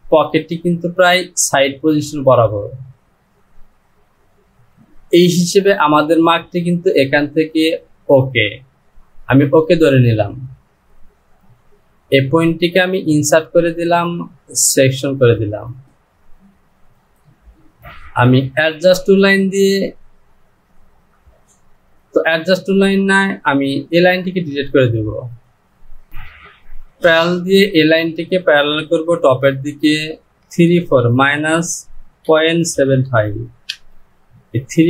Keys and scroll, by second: 24.1 Delete, 30.8 Down.